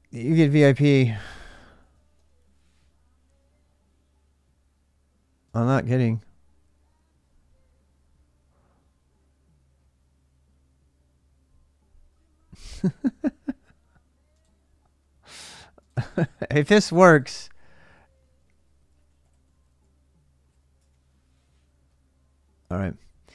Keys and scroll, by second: 1.3-1.9 typing, 18.1-20.6 typing.